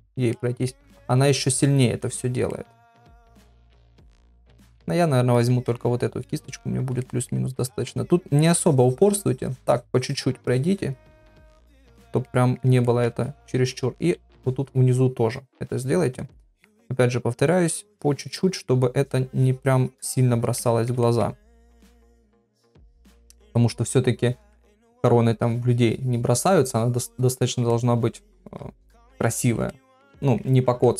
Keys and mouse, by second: 0.3 middle click, 1.2-2.3 ctrl+drag, 2.5 middle click, 3.3-4.3 ctrl+drag, 5.4 click, 7.0 shift+middle click, 7.6 middle click, 8.5 click, 10.5 click, 11.3 click, 12.2 middle click, 12.9 ctrl+middle click, 13.7 ], 14.0 ], 14.0 ], 14.7-16.2 drag, 14.7 ], 16.3 middle click, 16.8 ctrl+middle click, 17.5 click, 18.4 middle click, 19.3-20.5 drag, 20.6 middle click, 21.0 ctrl+middle click, 21.7 [, 21.8 [, 22.3 middle click, 23.7 click, 24.5 middle click, 25.4-27.6 drag, 27.7 middle click, 28.9 middle click, 29.7 middle click, 30.2 middle click, 30.8 middle click.